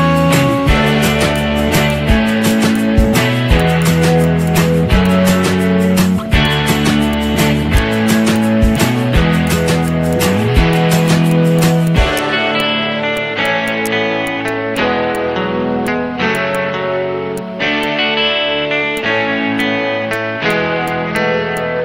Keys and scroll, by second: 2.6 z, 15.4 Up, 18.8 z.